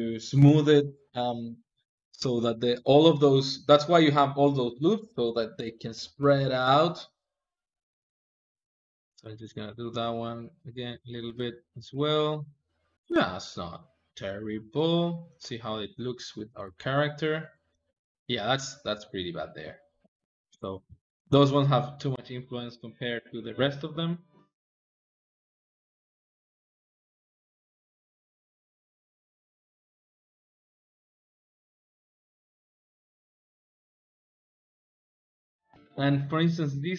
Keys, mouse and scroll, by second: 7.7 ctrl+click, 7.8 click, 8.6 click, 9.1 click, 9.3 click, 9.7 ctrl+click, 10.2 click, 10.4 ctrl+z, 11.1 click, 11.2 Tab, 11.5 Tab, 11.6 click, 16.1 ctrl+Tab, 17.4-23.1 ctrl+middle drag, 23.1 click, 24.0 click, 24.4 ctrl+Tab, 24.9 click, 25.3 ctrl+click, 25.5 ctrl+Tab, 25.6 ctrl+Tab, 26.1 shift+click, 26.4 ctrl+middle click, 26.9 shift+click, 27.0 shift+click, 27.2 ctrl+click, 27.6 ctrl+click, 28.1 h, 28.3 ctrl+click, 28.7 ctrl+click, 28.9 h, 29.1 ctrl+click, 29.3 ctrl+shift+middle click, 29.6 shift+click, 29.8-31.5 drag, 31.7 shift+click, 31.8 ctrl+click, 32.0 shift+click, 32.1 click, 32.4 middle click, 32.7 Home, 33.0 `, 33.3 ctrl+middle click, 33.6 n, 33.8 click, 34.0 click, 34.7 ctrl+middle click, 35.7-36.9 shift+middle drag.